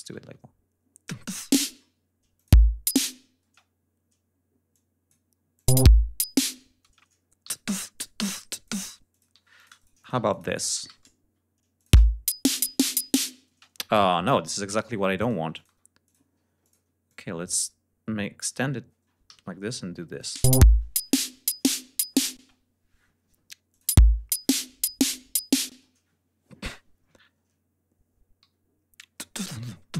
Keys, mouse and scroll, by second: 0.1 shift+d, 1.3 click, 2.3 click, 2.4 space, 3.4 space, 4.6 click, 5.5 click, 5.6 space, 6.8 space, 7.4 g, 7.9 click, 9.0 click, 9.3 s, 9.5-10.2 shift+drag, 9.7 shift+right click, 10.2 ctrl+shift+click, 10.8 ctrl+alt+shift+d, 11.6 alt+click, 11.8 alt+space, 13.3 space, 14.8 Delete, 15.1 click, 15.4 click, 15.9 click, 16.5 ctrl+click, 16.9-18.6 ctrl+drag, 19.1 alt+d, 20.0 click, 20.2 space, 22.2 space, 23.6 click, 23.8 space, 24.0 scroll up 1, 24.9 scroll down 1, 25.6 space, 26.9 ctrl+scroll down 2, 27.1 ctrl+scroll up 2, 28.3 d, 29.7 scroll up 2.